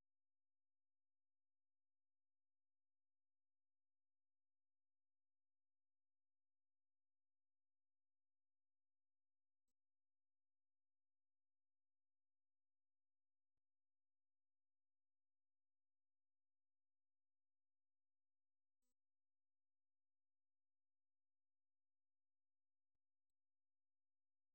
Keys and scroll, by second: 17.6 ctrl+w.